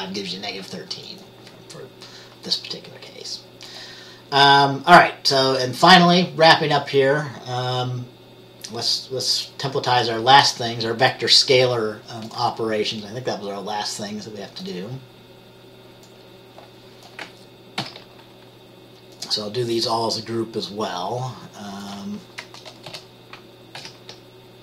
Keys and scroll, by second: 18.0 ctrl+c, 23.0 ctrl+c, 23.1 Return, 23.9 ctrl+v.